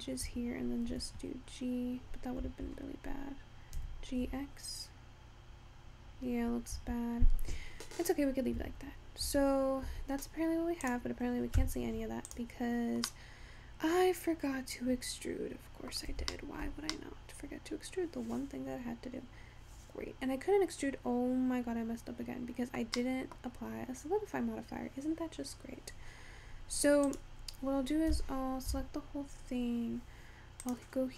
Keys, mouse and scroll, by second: 0.9 g, 3.8 g, 7.4-8.4 scroll down 2, 8.4 scroll down 2, 8.6 Tab, 9.3 Tab, 9.9 Tab, 10.5 scroll up 2, 10.9 click, 11.6 Tab, 12.3 click, 13.1-16.2 middle drag, 16.4 shift+middle click, 17.0 scroll up 1, 17.1-20.1 middle drag, 23.1 middle click, 23.5 scroll up 1, 24.0-24.8 scroll down 3, 24.8-25.3 scroll up 2, 27.1 click, 28.2 a, 28.8 Tab, 30.7 click.